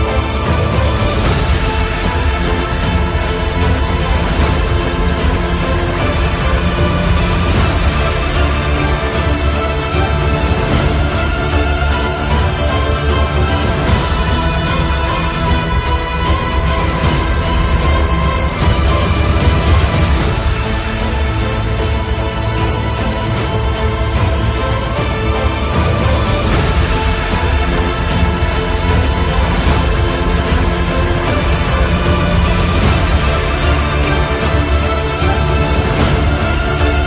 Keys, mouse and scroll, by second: 0.4-5.8 shift+drag, 3.5 typing, 5.9-17.0 drag, 23.1-27.3 drag, 23.4 typing, 27.3 click, 27.3 typing, 29.8-31.0 drag, 32.3 Return, 33.1 click, 33.1 typing, 35.6 Down.